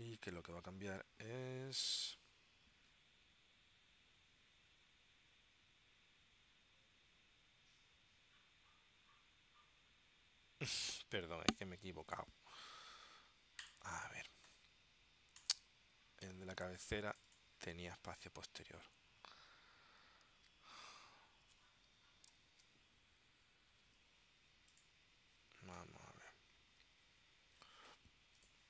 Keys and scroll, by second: 22.4 ctrl+alt+super+p.